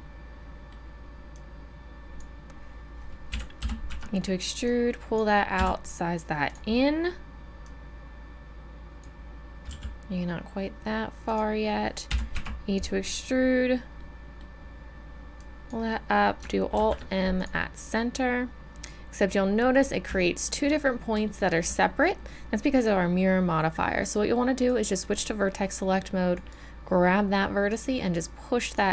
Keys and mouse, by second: 3.3 KP_1, 3.6 e, 4.6-6.5 drag, 5.5 s, 7.6-9.7 drag, 9.7 s, 12.1 e, 15.4-17.3 drag, 16.7 alt+m, 23.0-26.3 drag.